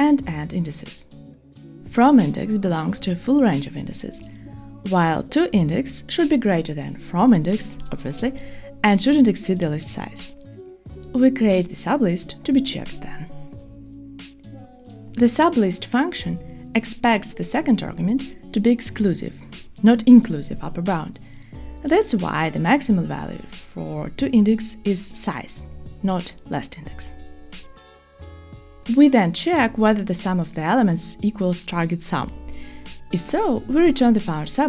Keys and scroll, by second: 5.8 Tab, 22.8 Return.